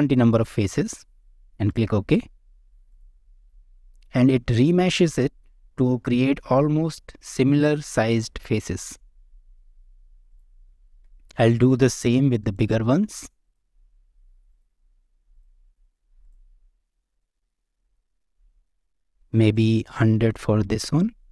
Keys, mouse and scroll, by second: 2.9 click, 3.4 click, 3.6 Tab, 3.9 middle click, 4.8-6.0 middle drag, 6.3 shift+middle click, 6.8-8.3 middle drag, 8.6-9.9 middle drag, 10.0 Tab, 10.3 click, 10.7 shift+middle drag, 11.0 middle drag, 11.7 scroll down 1, 11.9 shift+middle drag, 12.4 click, 13.4-14.6 drag, 15.3 click, 16.2-17.3 drag, 17.8 click, 18.7-21.3 drag, 20.9 KP_0.